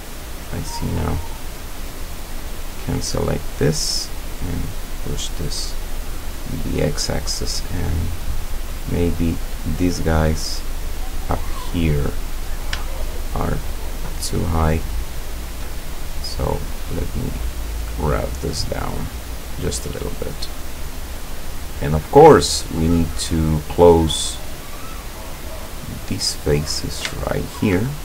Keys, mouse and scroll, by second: 2.6 click, 3.6 right click, 4.5-6.6 drag, 7.6-8.9 middle drag, 11.1 click, 12.4 right click, 13.0 shift+right click, 14.1 shift+right click, 15.3 shift+right click, 16.5-18.6 drag, 18.7 scroll down 2, 19.1 middle click, 20.0 middle click, 20.2 scroll down 2, 20.6-21.7 middle drag, 22.3-23.3 middle drag, 23.5 middle click, 24.9 click, 26.4-26.8 scroll up 1, 27.2-27.8 shift+middle drag.